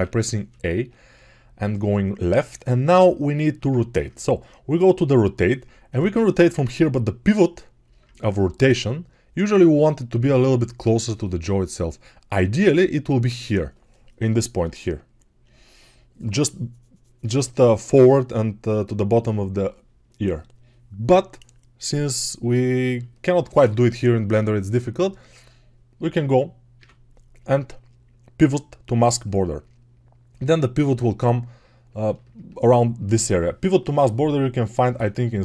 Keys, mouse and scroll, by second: 2.0-3.5 ctrl+alt+right drag, 3.5-35.4 ctrl+alt+drag, 26.6 q.